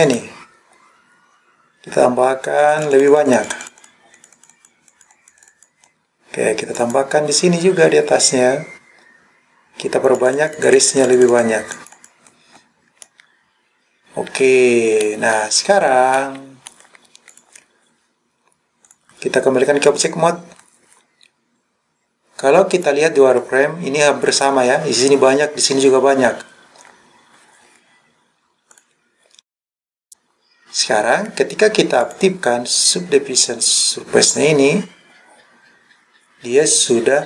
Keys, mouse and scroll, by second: 0.1 click, 2.6 click, 3.0 click, 3.1 click, 3.5 click, 3.7 click, 3.8 click, 4.2 click, 4.9 click, 5.2 click, 5.4 click, 6.8 click, 10.1 click, 10.3 click, 10.5 click, 10.7 click, 11.4 click, 11.8 click, 13.1-15.2 middle drag, 16.1 scroll up 1, 16.2 middle click, 17.3 click, 18.9-20.1 drag, 22.8 click, 28.8 click, 30.0-31.3 scroll down 1, 32.1 click.